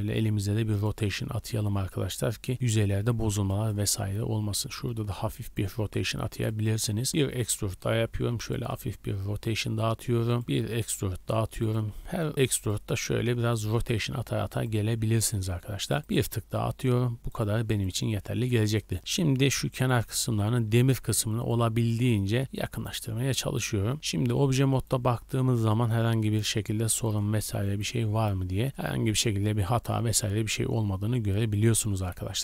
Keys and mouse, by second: 1.4-4.9 drag, 3.0 a, 3.1 a, 3.4 b, 3.9 r, 6.0-8.5 typing, 10.5 e, 11.0 r, 11.7 g, 13.0 r, 13.7 g, 15.5 e, 15.9 r, 16.2 g, 18.2 a, 18.3 a, 18.7 b, 19.0 g, 20.0 a, 20.2 a, 21.0-24.6 shift+drag, 21.8 b, 22.3 g, 23.9 Tab, 24.0 z, 24.6 middle drag, 24.6 drag, 24.8 middle drag, 25.3-26.3 drag, 26.7 middle drag, 27.0-27.5 drag, 27.8-32.4 drag, 28.7 g.